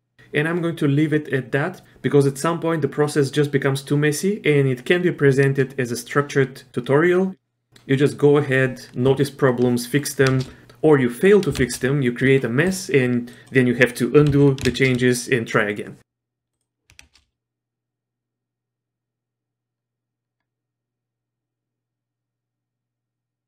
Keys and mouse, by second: 5.5 shift+space, 9.5 shift+middle click, 10.3 shift+space, 11.5 space, 13.3 click, 14.4 ctrl+z, 14.9 shift+space, 16.6 click, 17.2 shift+space.